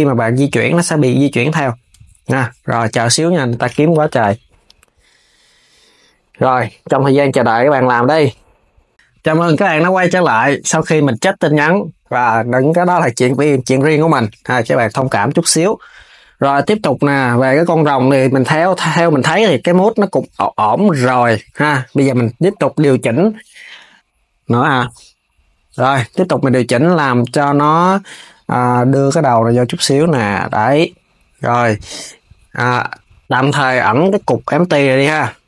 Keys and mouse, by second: 1.6 s, 8.9 click, 13.7 KP_3, 14.4 s, 20.4 Tab, 26.6 click, 27.1 KP_1, 28.3 click, 32.3 Tab, 33.1 click, 35.3 h.